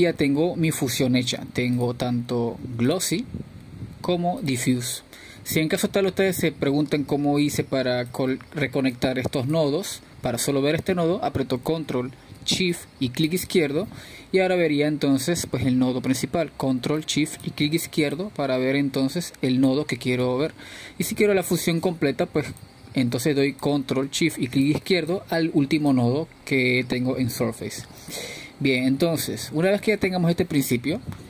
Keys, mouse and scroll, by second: 3.5-5.0 middle drag, 5.0 click, 7.7 ctrl+shift+click, 11.4 ctrl+shift+click, 13.2-16.6 drag, 20.6 ctrl+shift+click, 25.9-28.0 drag.